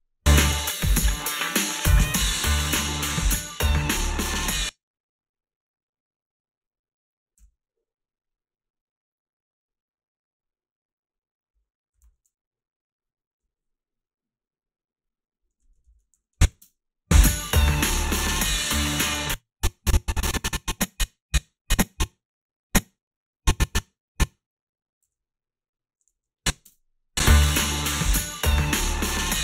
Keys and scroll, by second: 4.4 space, 7.4 f, 12.0 a, 15.8 ctrl+r, 16.2 a, 16.6 space, 19.0 space, 25.0 g, 26.2 a, 26.7 space.